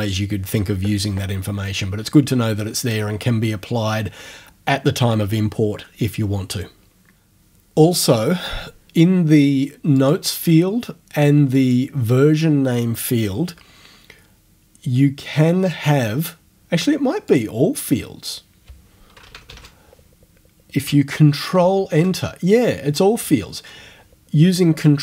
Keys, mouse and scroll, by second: 10.0 click, 11.6 click, 17.3 click, 19.0-20.1 typing, 21.6 ctrl+Return.